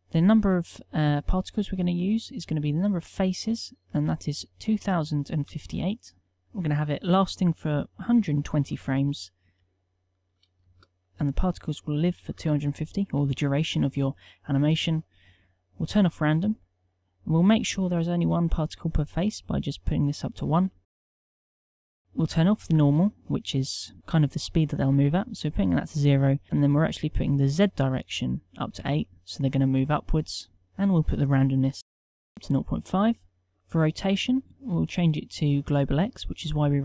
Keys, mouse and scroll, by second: 1.7 Tab, 5.6 Tab.